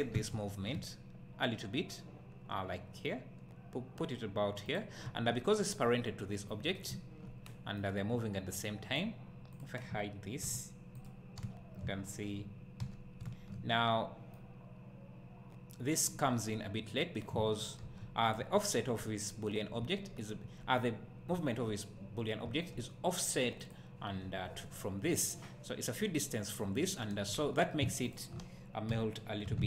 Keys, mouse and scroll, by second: 4.7 click, 5.1 `, 7.8-9.6 right drag, 9.6 click, 10.4 h, 11.0 click, 11.4 `, 12.8 h, 14.4-18.3 right drag, 17.9 alt+h, 18.3 click, 19.0 `, 23.7 click, 28.1 shift+click, 28.9 h.